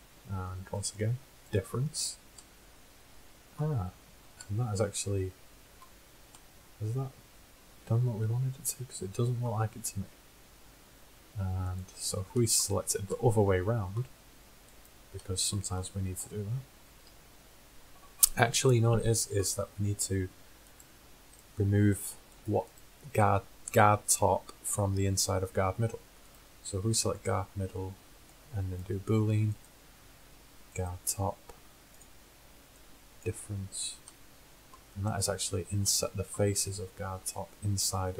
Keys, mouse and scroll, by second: 0.8-2.7 drag, 2.7-3.4 middle drag, 4.2 middle click, 11.7-13.7 drag, 13.6-16.3 middle drag, 16.3 click, 17.0 KP_1, 21.6-24.4 drag, 26.4 click, 28.1-28.8 drag, 29.0 click, 29.7-31.3 drag, 31.3-33.9 middle drag, 34.5-36.0 middle drag.